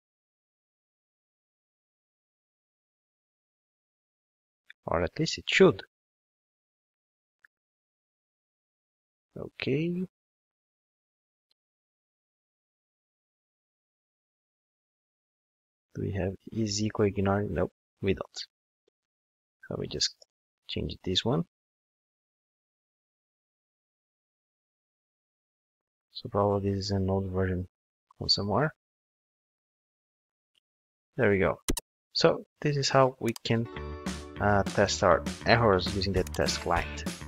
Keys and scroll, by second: 16.4 ctrl+space, 21.5 ctrl+shift+d.